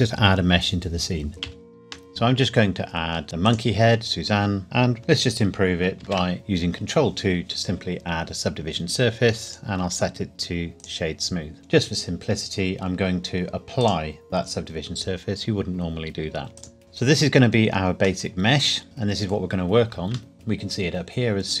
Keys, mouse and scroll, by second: 1.3 ctrl+a, 3.5 click, 6.0 ctrl+2, 9.5 right click, 10.8 click, 13.8 click, 16.6 click, 18.2 middle click, 20.3 click.